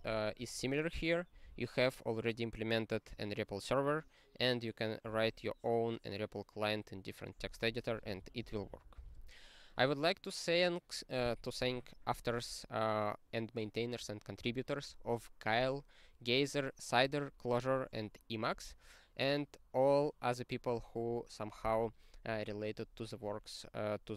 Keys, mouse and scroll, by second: 8.3 ctrl+n, 8.5 ctrl+n, 8.7 ctrl+n, 16.0-18.6 scroll down 12, 18.6-24.1 scroll down 18.